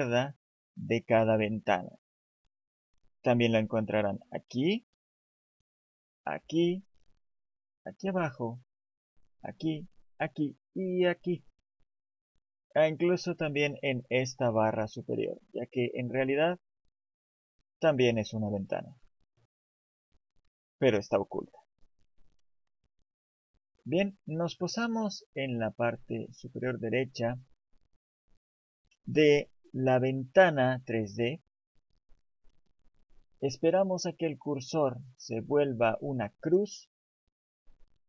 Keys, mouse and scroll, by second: 17.3 click, 19.5 click.